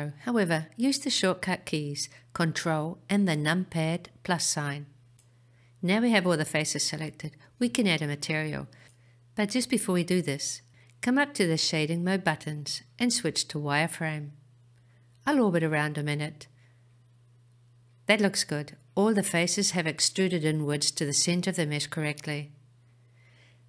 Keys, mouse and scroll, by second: 1.0-3.6 scroll up 2, 4.6 ctrl+KP_Add, 7.1-9.7 middle drag, 9.9-10.2 scroll down 1, 10.8-11.4 scroll down 1, 11.4-13.1 middle drag, 15.3 click, 16.2-20.4 middle drag, 20.7-21.5 scroll down 1, 21.5-23.6 middle drag.